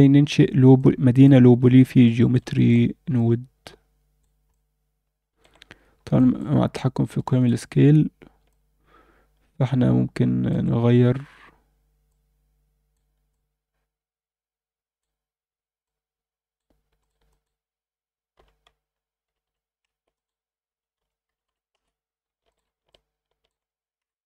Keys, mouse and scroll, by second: 0.8 click, 1.6 alt+a, 2.0-2.3 middle drag, 2.5 alt+shift+middle drag, 3.1-4.2 alt+middle drag, 4.5-5.4 alt+middle drag, 5.9 scroll down 1, 6.1 alt+shift+middle click, 6.6 scroll up 2, 7.2 alt+shift+middle click, 8.5-10.5 alt+shift+middle drag, 11.1-12.1 scroll up 4, 12.1 click, 13.3-15.1 drag, 15.8-17.0 drag, 17.3-19.8 drag, 19.4 7, 20.1-21.7 drag, 21.4 7, 22.5 middle click, 22.9-23.4 alt+middle drag, 24.0 KP_7.